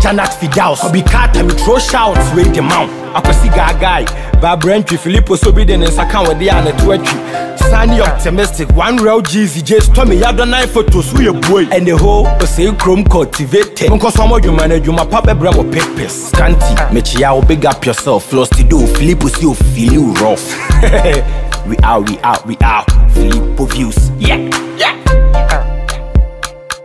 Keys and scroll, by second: 14.5 Right.